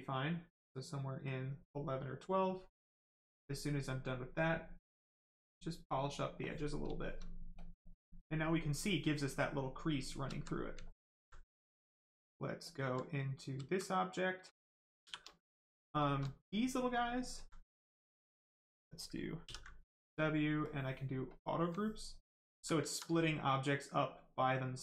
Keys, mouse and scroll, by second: 1.2 click, 5.1 click, 6.6 right click, 6.8 shift+right click, 7.5 shift+click, 8.1 right click, 9.9 shift+right click, 10.3 alt+right click, 10.7 alt+right click, 11.5 right click, 11.5 right click, 12.6 alt+click, 13.1 right click, 13.6 alt+right click, 14.1 right click, 14.2 right click, 15.0 shift+f, 15.4 right click, 15.9 shift+right click, 16.3 alt+right click, 17.7 alt+right click, 17.7 right click, 17.8 right click, 19.4 ctrl+w, 19.7 right click, 21.9 alt+right click, 23.3 right click, 23.4 right click.